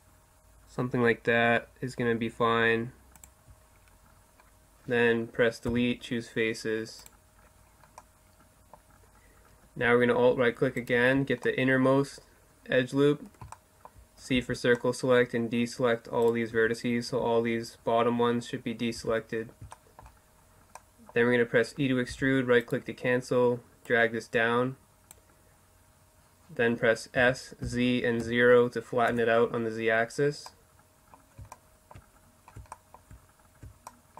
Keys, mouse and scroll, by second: 3.0-6.1 middle drag, 4.7 Delete, 10.5 right click, 10.7 middle click, 12.6 middle click, 13.4 c, 15.3-17.0 right drag, 15.5 z, 17.0 middle click, 18.0 z, 18.8 middle click, 19.1 middle click, 21.2 e, 22.9-24.6 drag, 26.2 s, 29.5-34.1 middle drag.